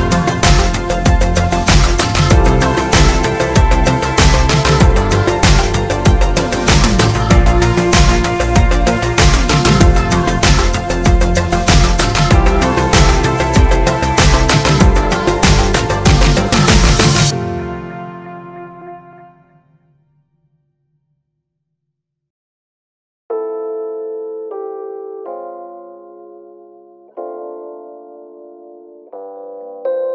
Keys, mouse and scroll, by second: 0.0 g, 1.5-2.6 drag, 1.7 g, 2.8 click, 3.0 g, 3.8-5.4 drag, 4.1 e, 5.9-7.9 drag, 6.2 g, 8.2 ctrl+r, 9.1 click, 9.5 s, 9.8-11.5 middle drag, 11.5 click, 12.8 s, 15.6-19.3 middle drag, 16.1 scroll down 1, 16.6 a, 17.9 s, 19.3 scroll up 1, 19.5-21.2 middle drag, 20.7 ctrl+z, 21.1 2, 21.2 click, 21.4 shift+click, 21.5 middle click, 21.8 shift+click, 22.1-23.7 middle drag, 22.3 s, 23.7 click, 24.5 middle click, 24.7 s, 26.2 middle click, 26.2 click, 27.0 a, 28.5-30.1 middle drag, 28.5 click.